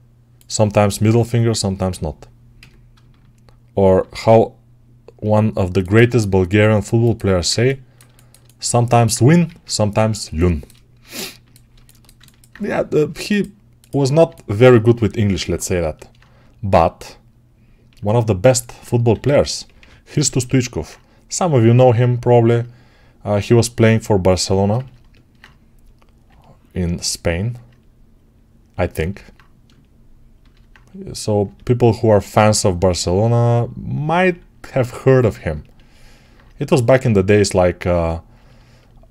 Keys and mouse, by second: 0.7-9.0 alt+right drag, 2.4 a, 3.8 shift+e, 9.3 ctrl+Tab, 14.1-19.0 alt+right drag, 14.9 g, 19.0 g, 19.5 [, 19.6 [, 24.3-30.3 alt+right drag, 30.3-35.4 alt+drag, 35.4-39.1 ctrl+alt+right drag.